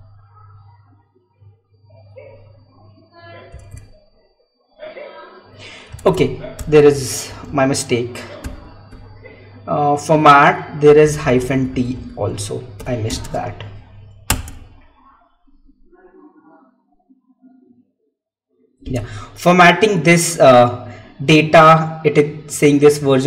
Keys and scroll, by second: 3.6 Tab, 6.3 Tab, 6.4 Up, 8.8 Left, 13.2 space.